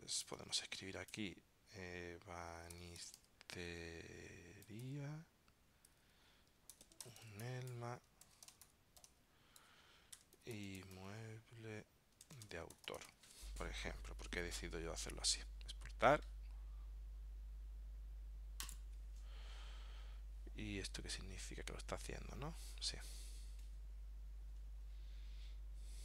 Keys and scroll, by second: 8.5 shift+u.